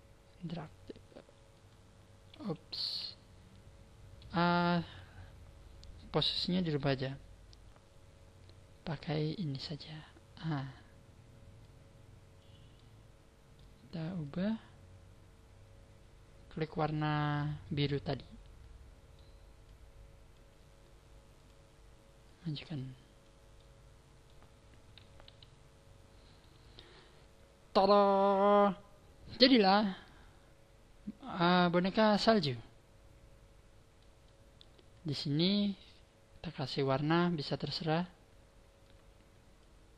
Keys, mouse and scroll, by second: 2.9 ctrl+z, 9.6 click, 11.6 click, 12.8 middle click, 14.2 click, 18.0 middle click, 19.6 click, 21.3 click, 22.2 click, 23.5 middle click, 25.2 KP_1, 25.6-26.6 scroll down 3, 26.6 scroll up 2, 30.9-31.7 scroll up 3, 31.7-32.3 scroll down 4, 32.1 middle click, 34.2 middle click, 34.9 right click, 36.6 click, 38.8 click.